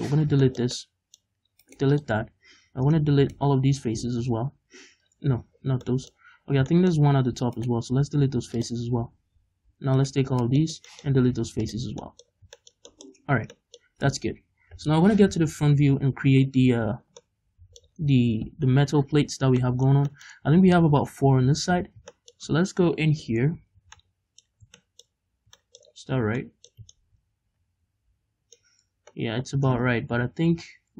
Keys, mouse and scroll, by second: 0.2 scroll down 1, 0.5 shift+middle click, 0.8 middle click, 1.7-3.0 right drag, 1.8 x, 3.3 right click, 4.6 x, 5.7 scroll down 1, 5.9 middle click, 6.3-6.6 scroll up 2, 7.6 alt+right click, 8.0 x, 10.0 alt+right click, 10.4 scroll down 2, 10.6 shift+middle click, 11.0 middle click, 11.1 x, 12.0 middle click, 12.4 scroll up 1, 12.6 shift+middle click, 13.0 middle click, 15.4 KP_1, 17.2 middle click, 17.9-18.5 scroll down 1, 18.5 KP_1, 19.5 scroll down 1, 19.6 middle click, 20.4-21.8 scroll down 1, 21.8-22.2 scroll up 1, 22.2 shift+middle click, 23.3-24.0 scroll up 1, 24.0-30.9 middle drag, 24.7 scroll down 2, 25.9-26.5 scroll up 2.